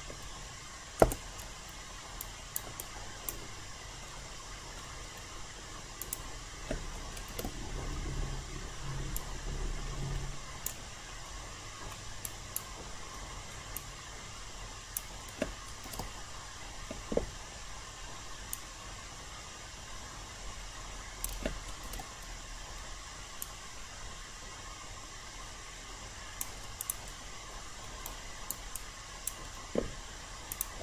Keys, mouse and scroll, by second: 1.0 BackSpace, 2.2 alt+right click, 2.8 alt+click, 4.0 alt+middle click, 6.0 click, 7.3 ctrl+e, 9.1-10.8 drag, 11.3 alt+middle click, 12.2 alt+right click, 13.1 alt+middle click, 13.7 alt+click, 15.9 ctrl+e, 18.5-21.5 drag, 21.8 ctrl+e, 23.4-26.5 drag, 27.5 alt+middle click, 28.0 alt+right click, 28.7 alt+click, 30.5 click.